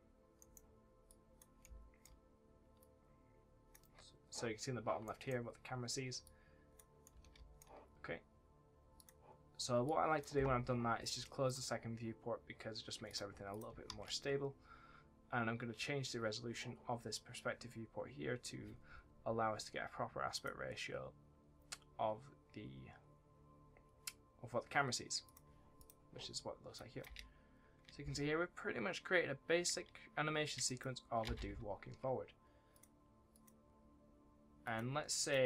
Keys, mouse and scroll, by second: 0.3 right click, 1.0 click, 1.5 right click, 1.6 s, 2.7 click, 6.2 click, 7.0 w, 8.9 click, 13.8 ctrl+s, 20.2 click, 25.2 click, 27.0 space, 30.6 space, 32.7 click.